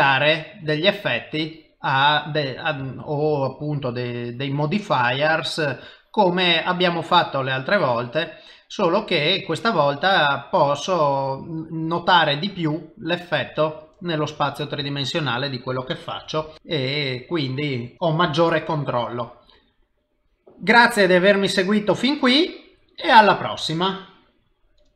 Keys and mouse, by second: 1.7 click, 1.7 middle click, 2.9 ctrl+middle click, 3.9 click, 5.3 click, 7.3 click, 7.3 middle click, 9.0 click, 9.5 middle click, 10.6 middle click, 13.2 click, 13.6 middle click, 14.3 ctrl+middle click, 14.8 middle click, 16.5 g, 16.9 middle click, 18.3 g, 19.1 middle click, 20.4 middle click, 21.4 middle click.